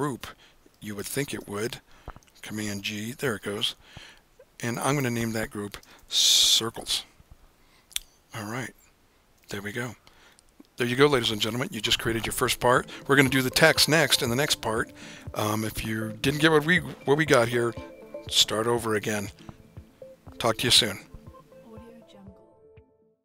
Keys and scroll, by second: 2.8 super+g, 5.6-7.4 typing, 9.4 Return.